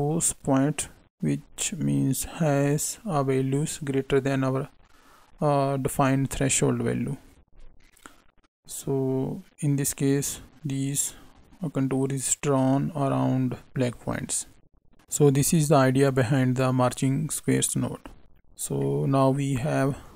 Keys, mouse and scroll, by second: 18.7 middle click.